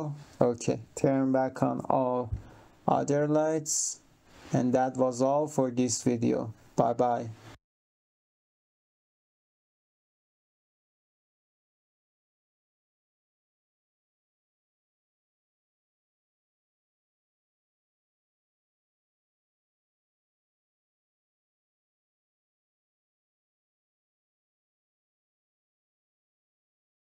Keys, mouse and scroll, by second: 3.3 click, 4.9 click.